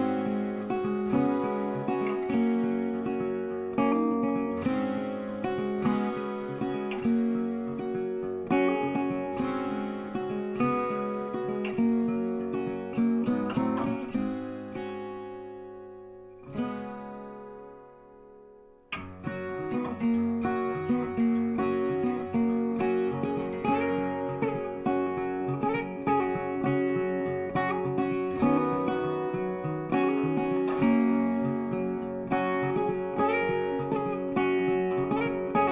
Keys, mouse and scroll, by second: 5.5-6.6 middle drag, 7.1-8.1 middle drag, 13.5 middle click, 14.2 middle click, 16.7-17.8 middle drag, 18.9-20.1 middle drag, 24.7 click, 28.7 scroll, 29.6-30.0 scroll, 30.5 scroll, 31.4 click, 33.1 click.